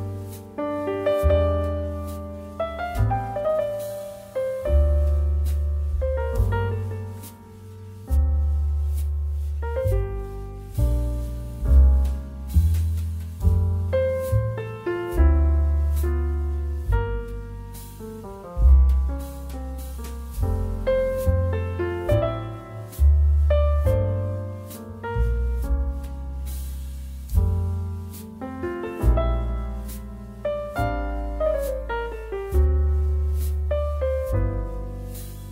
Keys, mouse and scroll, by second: 0.6 space, 2.2 ctrl+z, 2.7 ctrl+z, 3.7 space, 4.5 space, 4.8 ctrl+z, 5.7 space, 6.0 space, 11.4 space, 12.0 ctrl+s, 13.3 f, 14.3-17.5 typing, 21.5 space, 22.1 space, 22.6 space, 23.7-25.8 typing, 27.1 space, 27.5 space, 33.6 space, 34.2 space.